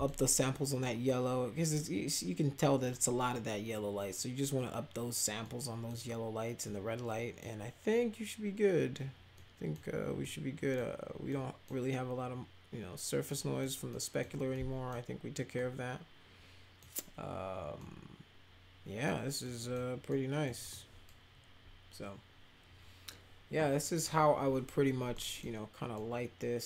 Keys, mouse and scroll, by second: 0.8 middle click, 3.3-4.1 middle drag, 5.4 middle click, 6.6 middle click, 9.3 middle click, 10.2 middle click, 11.2 middle click, 13.2 middle click, 13.8 middle click, 14.5 middle click, 15.5-16.8 middle drag, 17.7-19.0 middle drag, 19.4 middle click, 20.0 middle click, 20.6 middle click, 25.1 middle click, 25.9-26.6 middle drag.